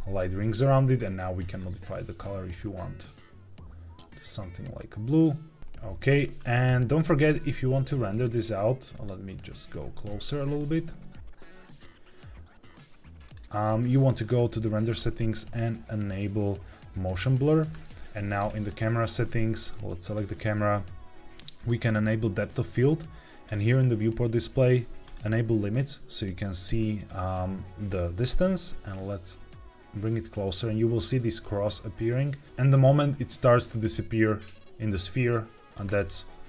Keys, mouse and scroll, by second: 0.9 click, 5.6 KP_0, 6.6 KP_0, 8.0 click, 8.8 click, 9.6 g, 9.8 z, 10.1 z, 13.2 click, 14.1 click, 14.8 scroll down 2, 17.0 click, 18.3 click, 19.9 click, 21.5 click, 23.4 click, 25.0 click, 27.2-28.0 scroll down 2, 28.4-35.7 drag, 36.0 middle click.